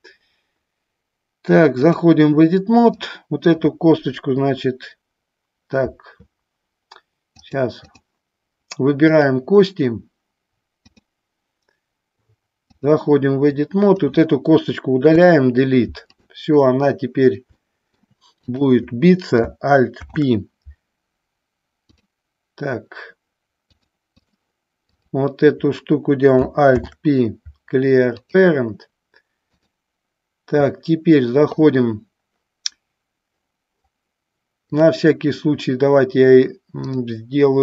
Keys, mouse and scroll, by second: 3.1 click, 7.5 click, 9.4 click, 11.2-13.2 drag, 13.8 click, 15.3 Delete, 17.7 shift+middle click, 18.5 click, 20.1 alt+p, 23.9 click, 25.0 click, 26.8 alt+p, 29.8-32.5 drag, 34.9 click, 37.0-37.6 drag.